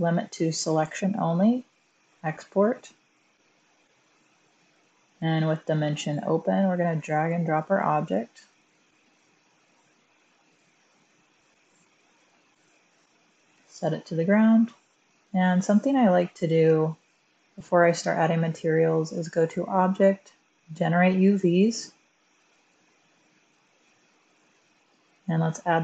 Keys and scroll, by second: 11.4 f, 11.4 BackSpace, 16.5 f.